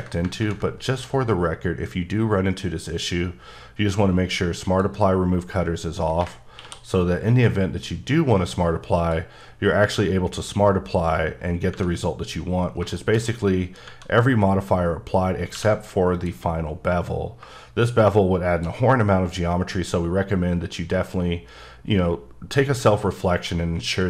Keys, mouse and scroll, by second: 0.3 ctrl+z, 0.4 ctrl+`, 4.7 click, 6.6 q, 8.6 click, 12.2-12.8 scroll up 1, 13.0 shift+middle click, 13.1-13.9 shift+scroll up 5, 15.5 q, 16.1 click, 17.4 shift+click, 18.9-21.5 scroll down 3.